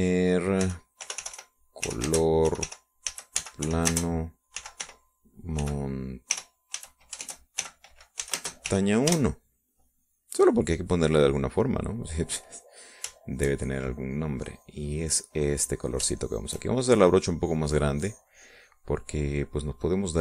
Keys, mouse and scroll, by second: 1.3-9.6 typing, 10.1 Return, 11.2 middle click, 11.9 middle click, 14.2 shift+click, 14.9-17.1 drag, 17.3 shift+click, 17.8-20.2 shift+drag.